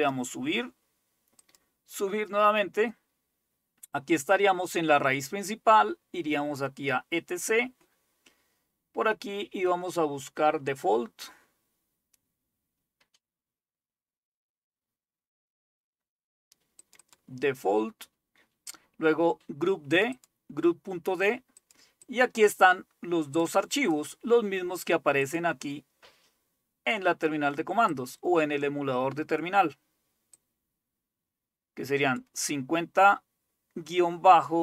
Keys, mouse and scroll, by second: 0.0 click, 1.4 click, 6.6 click, 7.0 click, 10.9-11.4 scroll down 2, 11.4 scroll down 1, 16.8 click, 19.9 click, 21.5 click, 22.1-23.6 drag, 23.8 click, 25.2 click, 27.9-29.5 drag, 30.4-32.2 drag.